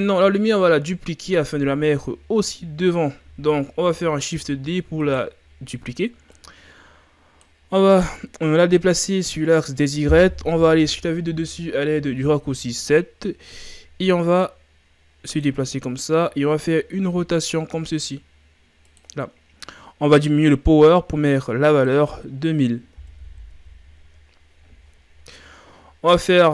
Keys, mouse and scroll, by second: 0.0 shift+scroll up 2, 4.3 shift+d, 6.3-9.3 drag, 10.9 KP_7, 13.2-14.3 scroll down 1, 14.5-15.8 drag, 15.8-16.2 shift+scroll down 4, 17.0 r, 21.8-23.3 drag, 23.3 KP_0.